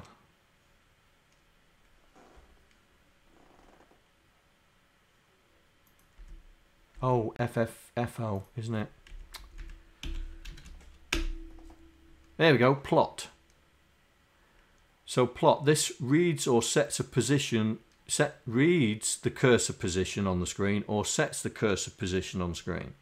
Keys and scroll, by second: 6.2 Down, 7.0 Down, 9.2 Right, 9.5 Left, 10.0 Delete, 10.5 shift+g, 11.2 Return.